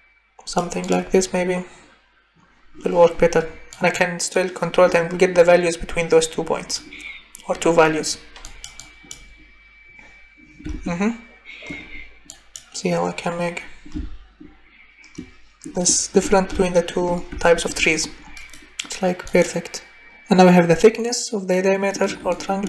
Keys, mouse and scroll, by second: 1.0 click, 3.9 click, 6.3 click, 21.9 click, 22.3-22.6 drag.